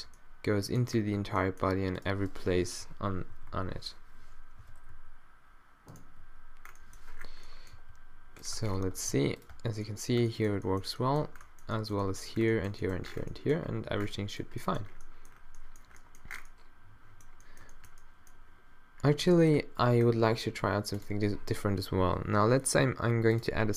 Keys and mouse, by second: 1.2 Tab, 2.9 p, 4.6 o, 4.9 ., 6.2 -, 6.7 click, 7.1 middle click, 7.8 g, 8.6 Tab, 9.0 Tab, 9.1 g, 9.5 Tab, 10.4 middle click, 13.5 click, 14.1 middle click, 15.4 middle click, 15.9 middle click, 17.0 middle click, 17.6 middle click.